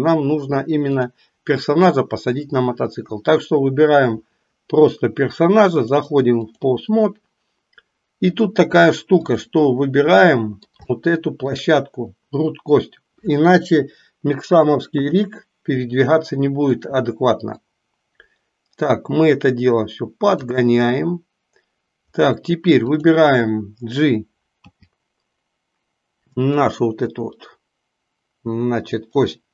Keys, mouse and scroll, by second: 1.0 click, 5.8 click, 8.1-8.6 drag, 9.2 click, 10.1-10.8 middle drag, 11.0-11.5 shift+middle drag, 14.8 KP_3, 16.4-16.8 shift+middle drag, 17.7-20.5 drag, 22.8 click, 24.7 g.